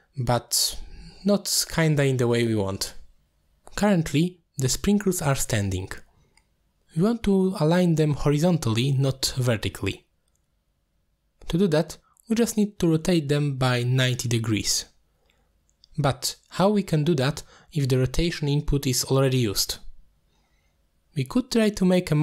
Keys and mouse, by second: 0.8 click, 2.6-4.9 middle drag, 5.6 middle click, 6.0 shift+middle drag, 7.3 shift+middle drag, 7.6-8.0 middle drag, 8.6 shift+middle click, 10.4 shift+click, 10.8 g, 12.4 click, 12.7 click, 13.8-14.1 drag, 14.2 g, 14.7 click, 16.1 middle click, 16.5 middle click, 17.0 click, 18.8 click, 19.5 middle click, 21.8 middle click.